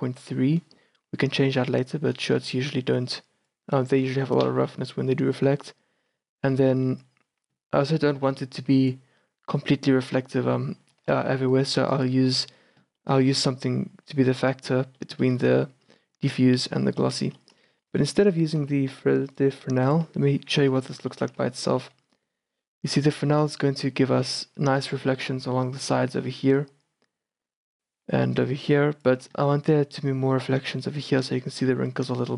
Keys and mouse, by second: 2.5 shift+b, 4.7 shift+b, 6.5 shift+b, 8.3 shift+b, 11.1 shift+b, 13.0-14.3 drag, 14.3-15.1 middle drag, 15.5-18.4 drag, 17.4 a, 20.7-22.4 drag, 21.9 shift+b, 26.7-28.0 d, 26.8-27.8 drag, 28.3-29.3 d, 29.3-30.8 drag, 30.8-32.3 d, 31.1-32.3 drag.